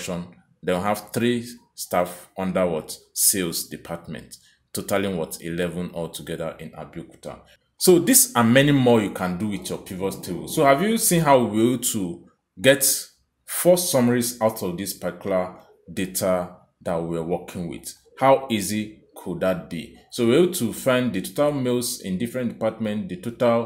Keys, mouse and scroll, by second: 7.5 click, 9.8 click, 14.2 click, 16.0 click, 17.4 click.